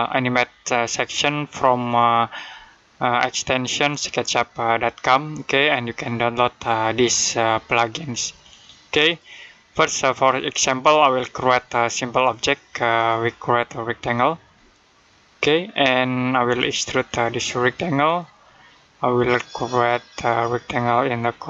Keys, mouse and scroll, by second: 1.7 click, 8.9 click, 14.4 middle click, 16.3 click.